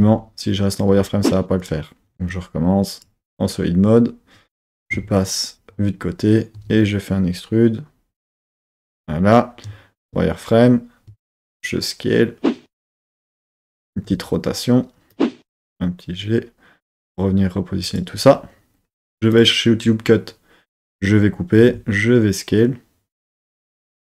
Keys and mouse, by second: 0.0 z, 1.6 click, 2.3 click, 4.8 KP_3, 6.5 e, 8.8 click, 9.6 z, 11.1 s, 12.8-14.1 drag, 14.1 r, 15.1 click, 15.4 g, 17.9 click, 19.3-21.6 drag, 21.6 s.